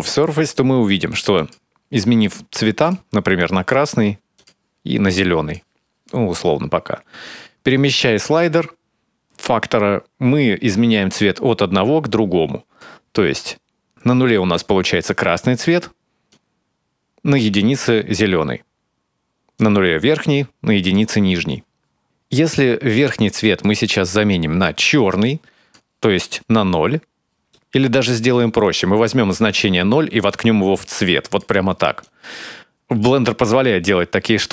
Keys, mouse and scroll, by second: 0.3 middle click, 1.1 click, 7.0 click, 16.1 click, 19.3 click, 23.2 click, 27.3 middle click, 28.2 click, 30.0 click, 31.8 click, 33.7-34.2 scroll down 2, 34.0-34.5 scroll up 2.